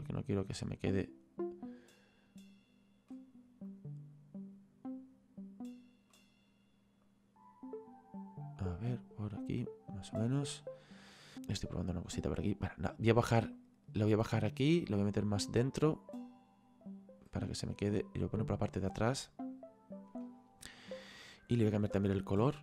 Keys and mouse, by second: 3.7 click, 7.1 click, 9.6 click, 11.3 click, 13.6 click, 15.0 click, 18.1 click, 21.1 click.